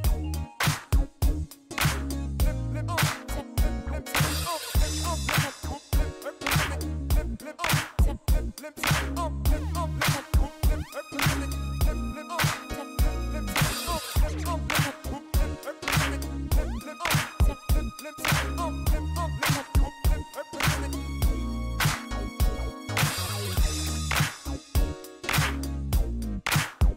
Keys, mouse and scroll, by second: 1.2 click, 2.7 click, 6.8 click, 9.8 click, 11.3 click, 12.6-13.7 typing, 14.9 click, 16.5 click, 20.8 click, 22.8 scroll down 2, 23.0 middle click, 24.1 click, 24.7 click, 25.6 shift+right click.